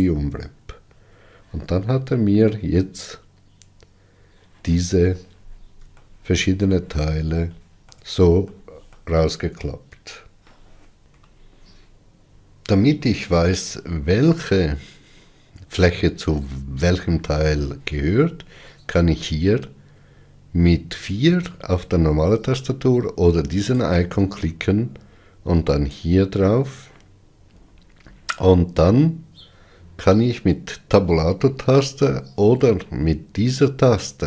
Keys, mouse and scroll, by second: 5.9-26.1 shift+middle drag, 26.1 click.